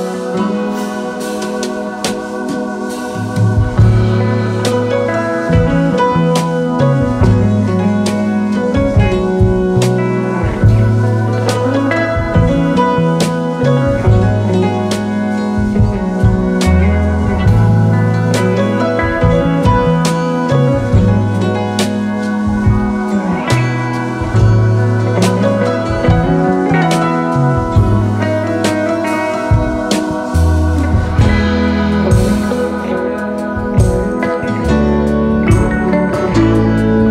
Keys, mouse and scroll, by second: 3.2-4.1 space, 12.1-14.5 scroll up 1, 14.5 right click, 15.9 double click, 17.1 space, 17.4 space, 17.4 space, 18.4 alt+scroll up 2, 18.8 space, 19.8 typing, 27.2-29.6 typing, 30.9-32.0 typing, 31.8 double click.